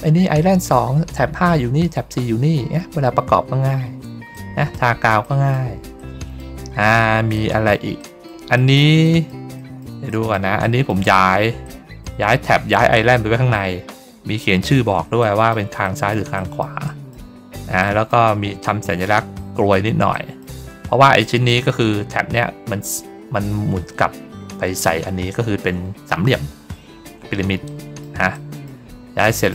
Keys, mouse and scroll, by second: 2.7 middle click, 3.0 ctrl+middle click, 4.2 middle click, 5.1 middle click, 5.9 middle click, 7.2 middle click, 7.9 middle click, 8.4 middle click, 8.9 middle click, 9.5 middle click, 10.0 middle click, 10.5 middle click, 11.5 middle click, 13.4 middle click, 15.1 middle click, 15.7 middle click, 16.2 middle click, 16.7 middle click, 17.7 middle click, 20.0 middle click, 20.7 ctrl+middle click, 21.1 middle click, 26.8 ctrl+scroll down 2, 27.5 middle click, 28.2 middle click, 29.1 middle click.